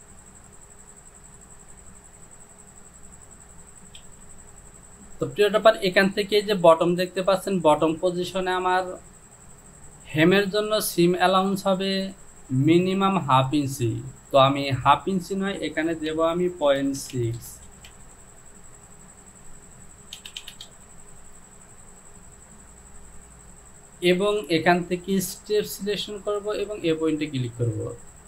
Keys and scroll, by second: 16.7 KP_Decimal, 17.1 KP_6, 17.2 Down, 17.4 KP_Decimal, 17.7 KP_6, 17.9 Down, 20.4 Down, 20.7 Down.